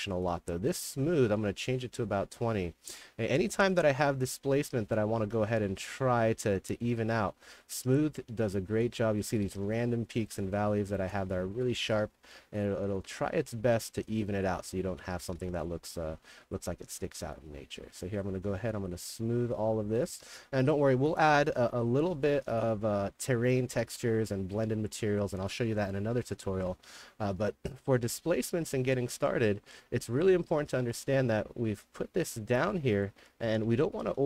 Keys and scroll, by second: 2.8-3.9 typing, 8.8-11.8 typing, 14.4-16.7 typing, 19.9-22.1 typing, 26.1 d, 26.7 a, 27.2 w, 29.0-34.2 typing.